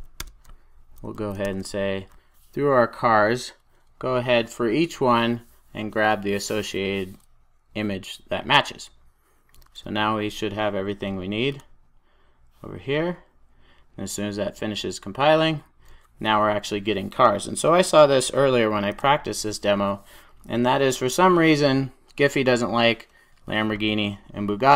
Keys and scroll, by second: 0.1 Return, 1.3 Return, 9.6 super+s.